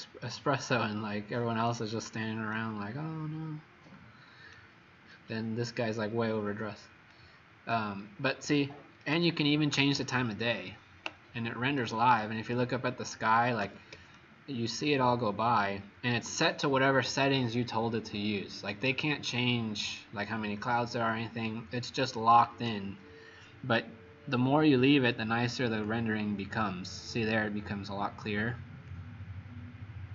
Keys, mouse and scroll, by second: 8.2-8.7 scroll down 2, 9.1 shift+right click, 12.0 click, 13.6 h, 14.1 shift+right click, 25.2 click.